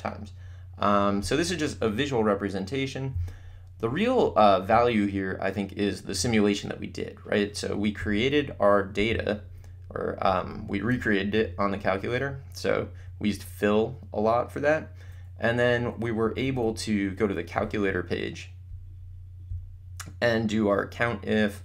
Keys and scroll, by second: 11.7 Down, 15.6 Right, 16.2 Up.